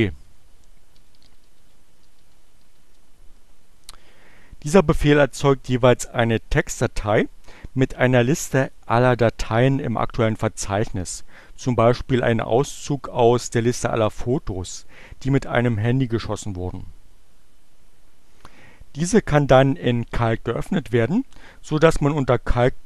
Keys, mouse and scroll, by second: 0.0-2.8 typing.